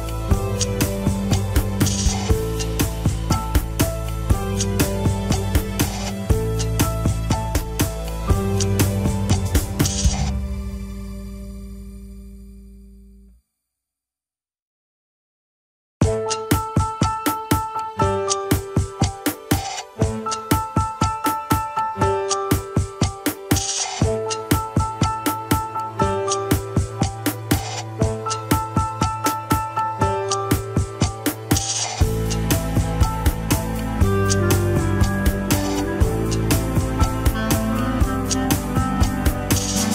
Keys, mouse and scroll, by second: 0.6 click, 1.6 shift+click, 1.8 scroll up 4, 2.2 shift+middle click, 2.5 scroll up 2, 3.0 ctrl+Tab, 3.2 alt+z, 3.4 alt+z, 4.0 click, 4.3 alt+z, 4.4 scroll down 1, 4.8 g, 11.6 click, 12.6 click, 13.3 g, 15.1 click, 16.4 click, 17.1 g, 20.7-21.5 scroll up 6, 21.0 shift+middle drag, 21.6 alt+z, 22.0 alt+z, 22.4 g, 25.9 alt+z, 26.6 scroll down 1, 28.2 ctrl+Tab, 29.1 click, 29.3 click, 29.6 scroll up 1, 29.8 Tab, 30.1 alt+z, 30.7 click, 31.0 alt+z, 31.5 click, 32.7 shift+z, 33.2 alt+z, 33.6 alt+z, 33.8 click, 35.0 alt+z, 35.4 click, 35.7 g, 36.4 alt+z, 37.5 ctrl+Tab, 38.0 scroll down 4, 38.3 scroll up 3.